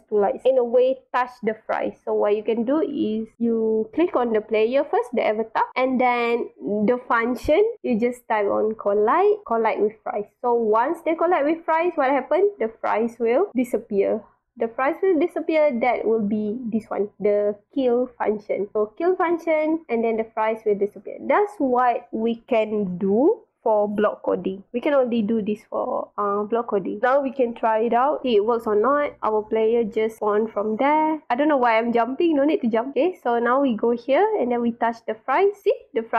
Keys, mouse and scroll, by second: 8.7 click, 13.2 click, 15.7 scroll down 2, 17.8 click, 19.9 click, 27.3 click, 28.7-31.0 drag, 29.8 w, 31.3-32.4 drag, 32.3 space, 32.9-33.4 drag, 32.9 w, 32.9 space, 33.7 click, 34.8-36.1 drag, 35.0 w.